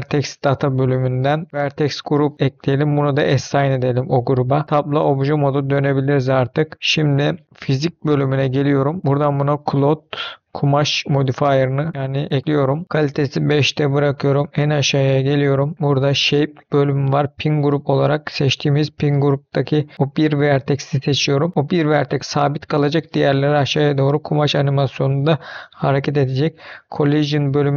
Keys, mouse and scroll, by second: 2.1 click, 3.1 click, 4.6 Tab, 4.6 middle click, 6.0-6.8 scroll down 2, 7.0 middle click, 7.8 click, 10.9 click, 12.8-16.0 scroll down 10, 16.0 click, 16.6-17.5 scroll down 2, 17.5-18.9 drag, 24.5-26.1 scroll down 5, 26.1 click, 26.8-27.6 scroll down 4, 27.6-27.7 scroll down 2.